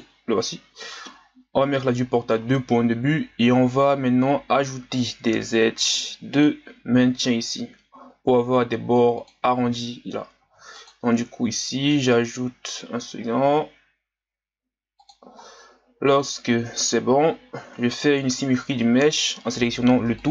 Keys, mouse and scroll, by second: 1.9 click, 2.7-3.6 scroll up 1, 3.6-4.0 ctrl+scroll down 2, 4.0-4.9 scroll up 1, 5.8 ctrl+r, 10.4 ctrl+r, 15.5 scroll down 1, 17.5 a, 17.7 a, 20.2-20.3 drag.